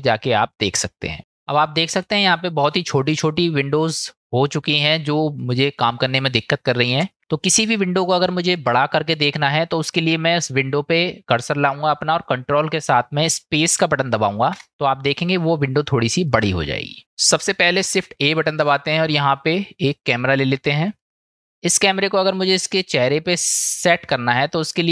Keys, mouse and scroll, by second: 7.3-7.7 middle drag, 8.6-9.2 middle drag, 14.7 ctrl+space, 16.4-17.0 middle drag, 18.2 shift+a, 23.4-24.9 middle drag.